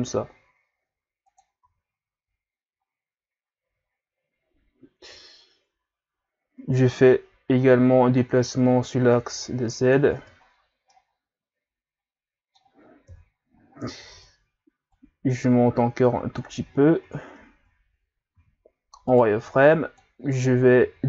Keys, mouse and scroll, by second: 1.7 z, 2.1 Tab, 2.8-3.1 scroll down 3, 3.7 a, 6.0-6.6 scroll up 3, 6.6 Tab, 7.7-10.2 drag, 10.2 Tab, 10.5-10.9 scroll down 4, 10.9-13.1 middle drag, 13.1 KP_3, 13.8 scroll up 3, 14.1 Tab, 14.9-16.8 drag, 16.8 shift+scroll up 3, 17.7 scroll up 1, 18.4 z, 19.1 right click, 19.3 b, 20.9 g.